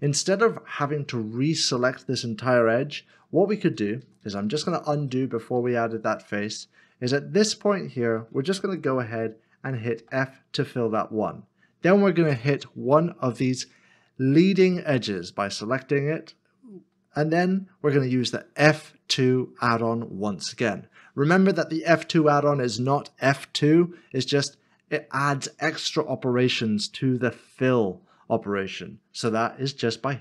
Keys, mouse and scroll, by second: 2.7 ctrl+z, 3.5 ctrl+z, 3.7 ctrl+z, 4.0 ctrl+z, 4.2 ctrl+z, 4.5 ctrl+z, 4.7 ctrl+z, 4.9 ctrl+z, 5.5 ctrl+z, 5.6 ctrl+z, 6.7 middle click, 11.4 f.